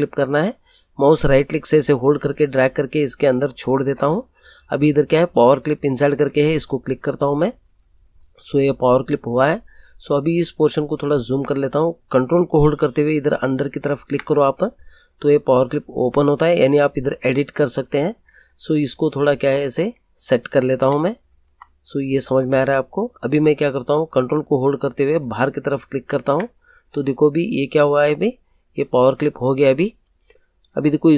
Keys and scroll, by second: 20.7 Up.